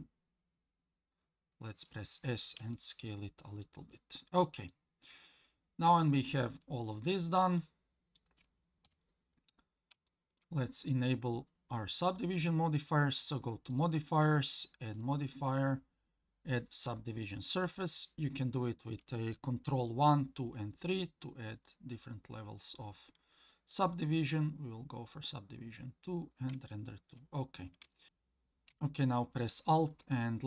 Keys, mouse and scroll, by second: 2.7 shift+middle click, 3.4 shift+middle click, 3.9 shift+middle click, 4.4 shift+middle click, 5.3 scroll down 1, 6.0 shift+middle click, 6.6-8.2 middle drag, 8.9 KP_1, 9.6 scroll down 1, 10.1 shift+middle click, 13.7 click, 14.9-17.6 drag, 23.7 click, 26.7 shift+middle click, 27.4-27.8 scroll up 3, 27.9 shift+middle click, 29.8 alt+click.